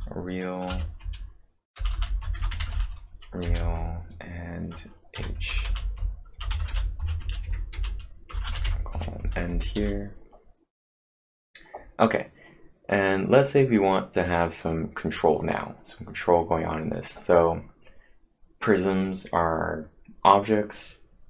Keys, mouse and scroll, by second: 0.0-8.3 typing, 8.3 Return, 9.5-10.3 typing.